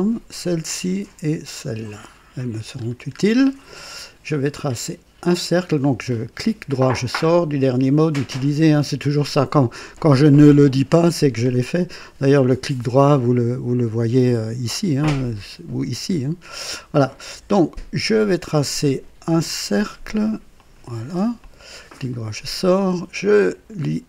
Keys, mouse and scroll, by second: 0.4 click, 2.0 click, 2.8-4.0 scroll up 2, 3.4 right click, 6.4 right click, 9.0 click, 20.5 click, 21.4 click, 22.1 right click.